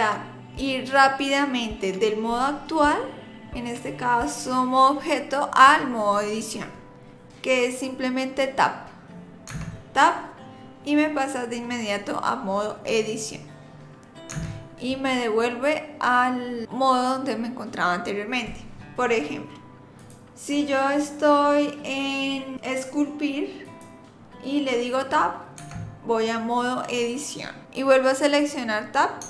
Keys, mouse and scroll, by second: 9.5 Tab, 12.6 scroll up 2, 13.1-13.5 scroll down 2, 14.3 Tab, 20.0 click, 25.6 Tab.